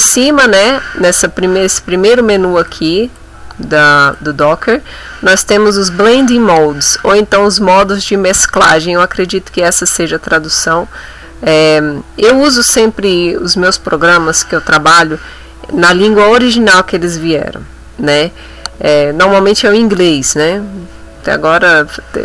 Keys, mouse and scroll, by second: 2.7 click, 4.1 click.